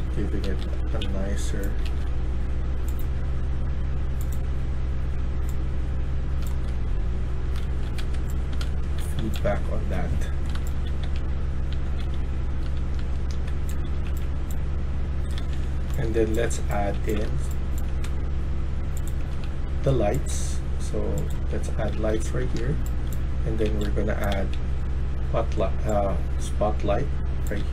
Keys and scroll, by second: 0.0-2.3 typing, 6.1-17.6 typing, 7.9 Escape, 19.1 a, 19.3 a, 21.3-23.8 typing, 27.4-27.7 typing.